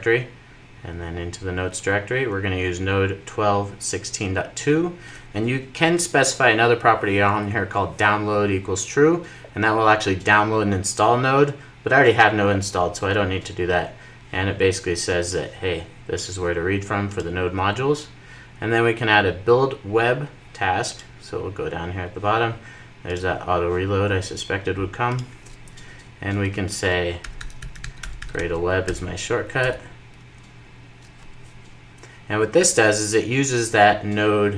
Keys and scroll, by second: 28.7 super+j, 28.9 super+j, 30.7 Return.